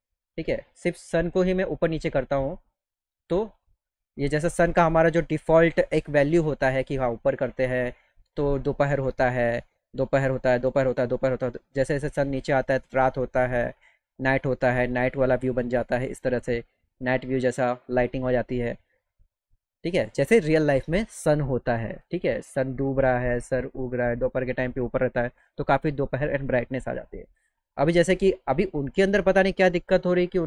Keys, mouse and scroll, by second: 1.1-5.0 drag, 7.8 right click, 8.4 click, 16.0 click, 19.1-21.3 drag, 23.7 click, 25.9 click, 26.6-28.7 drag.